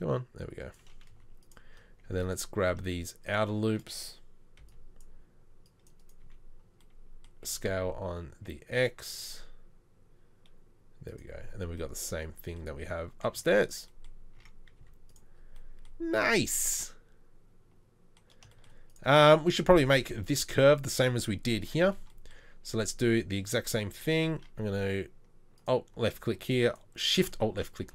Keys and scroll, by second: 1.3 z, 4.6 c, 6.3 z, 7.5 s, 13.4 z, 14.4 Tab, 14.8 z, 21.9 Tab, 27.8 Delete.